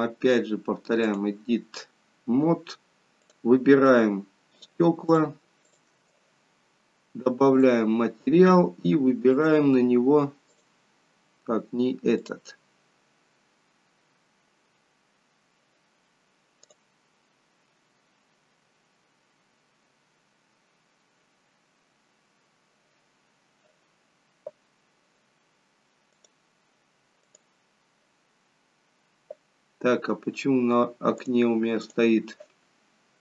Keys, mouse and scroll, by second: 0.3 click, 2.3-2.9 scroll up 2, 3.3 click, 3.3-4.0 scroll up 1, 4.6 shift+click, 7.7 click, 19.1-20.0 scroll down 1, 20.4 scroll down 1, 26.3 click, 28.6-30.3 scroll down 1, 30.3 scroll down 1, 31.3 click.